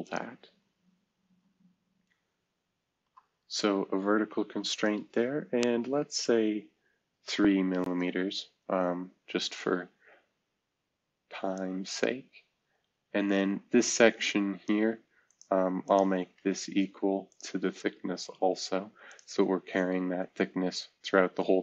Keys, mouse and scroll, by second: 2.9 shift+v, 7.2 3, 7.8 Return, 18.2 e, 19.6-20.3 scroll down 1.